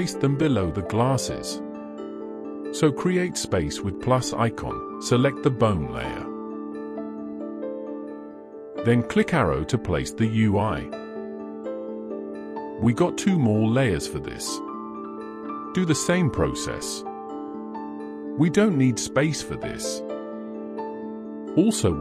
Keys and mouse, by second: 0.5 click, 6.8 click, 9.7 click, 16.4 click, 17.5 click.